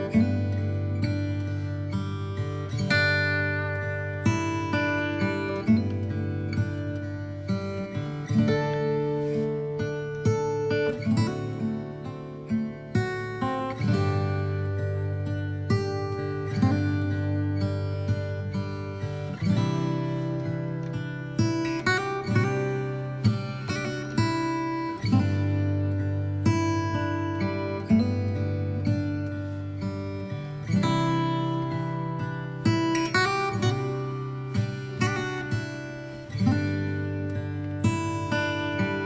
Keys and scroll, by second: 11.6 x, 13.5 x, 18.6 x, 19.8 space, 21.1 x, 22.9 space, 24.4 space, 33.1 ctrl+alt+shift+e.